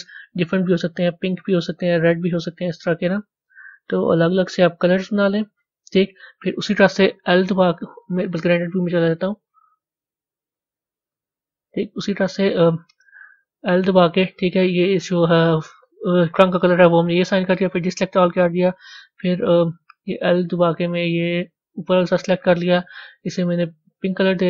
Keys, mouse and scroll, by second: 0.5 click, 3.3 click, 4.4 click, 11.6-13.5 middle drag, 16.8 click, 23.8 click.